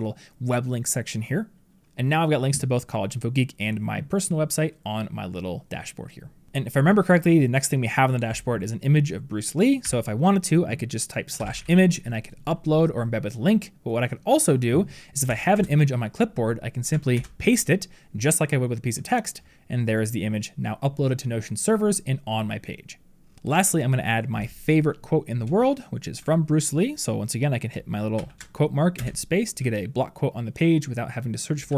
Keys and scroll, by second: 17.0 ctrl+v.